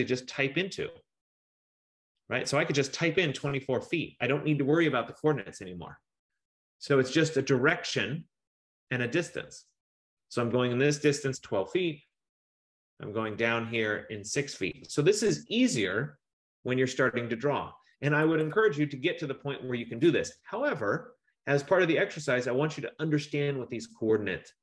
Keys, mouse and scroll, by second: 3.1-4.3 typing, 5.0 Return, 11.1-12.2 typing, 14.7-15.6 typing, 18.3-20.2 typing.